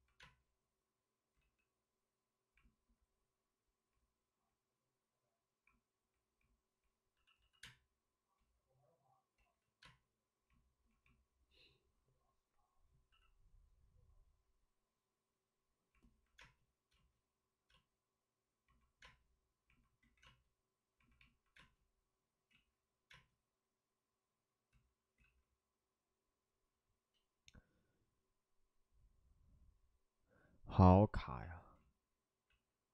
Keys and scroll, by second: 0.0 ctrl+z, 0.1 space, 1.3 ctrl+z, 7.1 c, 7.3 c, 7.5 space, 8.0 space, 9.3 ctrl+z, 9.3 space, 13.0 c, 15.1 c, 16.3 space, 16.9 space, 17.6 space, 19.0 space, 20.0 ctrl+z, 20.2 space, 22.5 ctrl+z, 23.0 space, 24.7 ctrl+z, 27.3 ctrl+z, 31.7 ctrl+z, 32.4 ctrl+z.